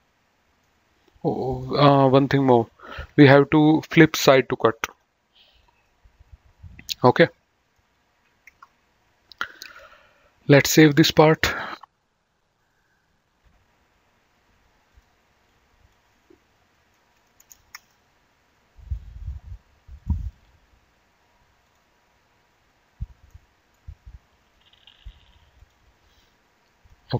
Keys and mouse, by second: 1.4 right click, 2.2 click, 3.9 click, 5.9 middle click, 10.9 click, 13.3 click, 14.9 click, 17.4 BackSpace, 18.7 KP_Enter, 19.8 click, 21.6 click, 23.2 middle click, 25.6 click.